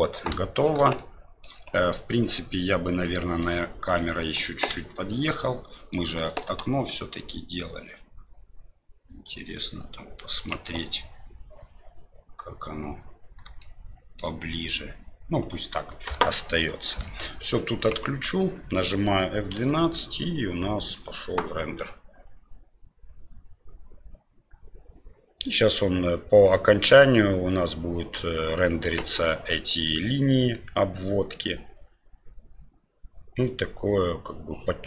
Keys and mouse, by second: 1.0 shift+middle click, 3.0 middle click, 3.9 right click, 4.7 KP_7, 6.4 g, 13.6 shift+middle click, 19.9 F12.